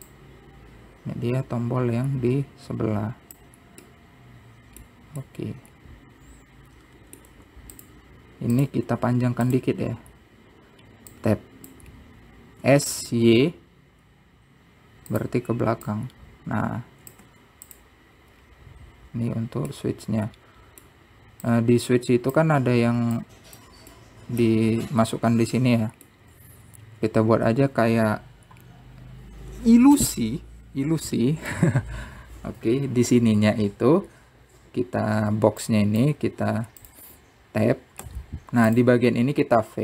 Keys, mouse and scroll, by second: 1.3 click, 5.1-8.5 middle drag, 9.8 click, 12.4-13.4 drag, 13.4-13.9 scroll up 2, 13.9 s, 17.1 click, 19.5-20.6 scroll down 3, 20.9-22.7 middle drag, 22.7 click, 24.4 click, 25.1-27.5 middle drag, 27.5-28.3 scroll up 4, 28.3-31.2 scroll down 1, 36.9 click, 37.6-38.0 scroll up 1, 38.0 click, 39.2 b.